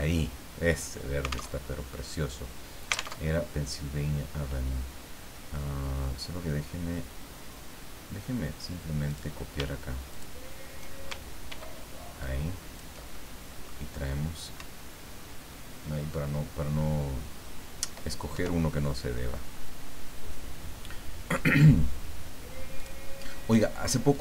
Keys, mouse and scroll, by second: 1.5 alt+Tab, 3.2 alt+Tab, 6.6 scroll down 2, 7.9 scroll down 2, 9.0 click, 10.1 shift+click, 11.5 ctrl+d, 12.2 ctrl+click, 13.3 ctrl+middle click, 14.6 Up, 22.8 click, 24.1 click.